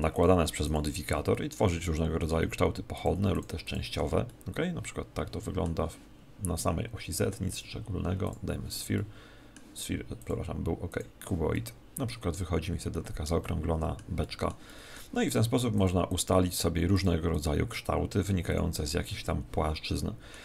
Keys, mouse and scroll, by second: 0.1 click, 1.3-2.9 middle drag, 2.9-5.5 drag, 5.3 middle click, 7.4 click, 8.9-10.7 middle drag, 10.1 click, 11.5-16.5 middle drag, 15.7-20.3 drag, 19.1-20.4 middle drag.